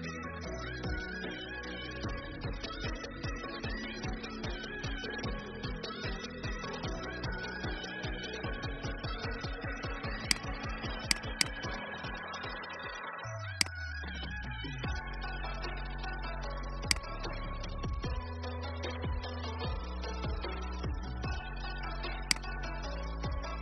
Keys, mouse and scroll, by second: 2.1-2.4 alt+scroll down 1, 3.8 scroll up 1, 9.6 alt+v, 10.3 click, 16.8 space, 17.8 click, 22.2 shift+click.